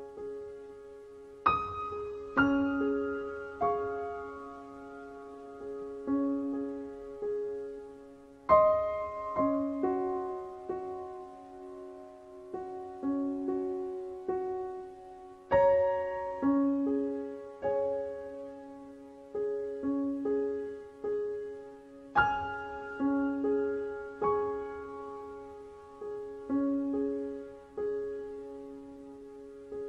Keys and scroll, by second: 5.3 KP_4, 5.3 KP_5.